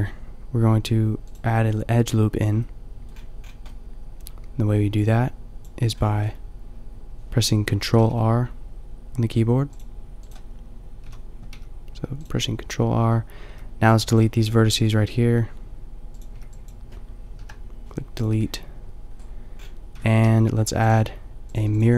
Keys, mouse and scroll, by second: 2.6 click, 7.9 ctrl+r, 11.0 a, 11.6 b, 13.4 b, 14.3 g, 16.4 b, 17.3 Delete, 19.9 Tab.